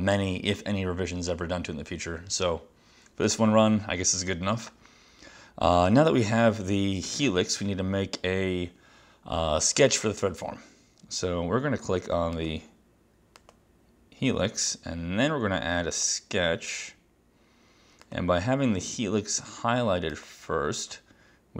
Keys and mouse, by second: 16.1 click, 18.2 click, 20.2 click.